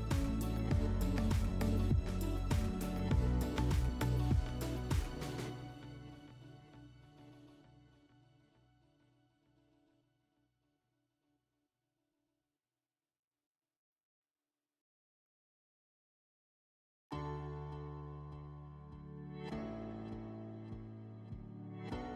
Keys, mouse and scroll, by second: 3.0-3.5 scroll, 3.8 click, 6.7 right click, 8.9 click, 11.0 click, 13.0 middle click, 13.1-13.4 scroll, 14.8-16.8 middle drag.